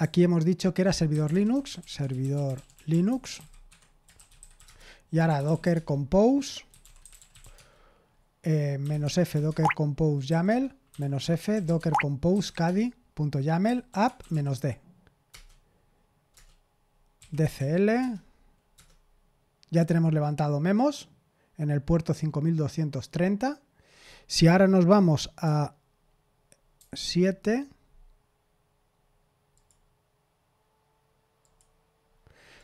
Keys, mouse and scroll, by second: 0.0-14.8 typing, 15.3 Return, 16.3 Return, 16.9-18.0 typing, 18.7 Return, 26.7 super+7, 29.5 click, 31.4 click, 32.5 click.